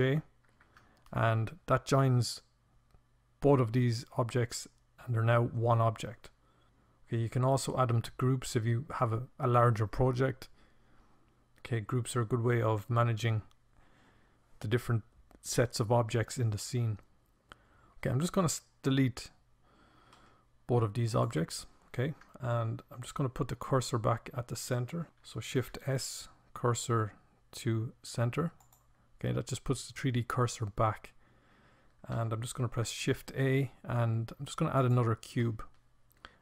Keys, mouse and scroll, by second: 19.0 Delete, 24.5 ctrl+s, 31.7 shift+a.